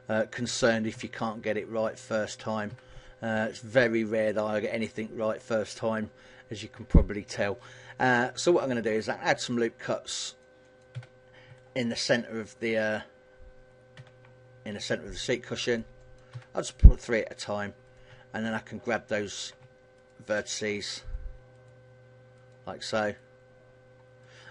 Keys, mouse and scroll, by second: 0.7 s, 2.4 click, 2.5 a, 2.7 middle click, 7.9 ctrl+r, 10.1 click, 10.5 click, 10.7 a, 13.7 ctrl+r, 15.5 click, 15.7 click, 16.0 a, 16.6 middle click, 17.7 right click, 18.3 shift+right click, 18.8 middle click, 19.7 shift+right click, 20.5 shift+right click, 22.1 shift+right click, 22.8 shift+right click, 23.9 shift+right click.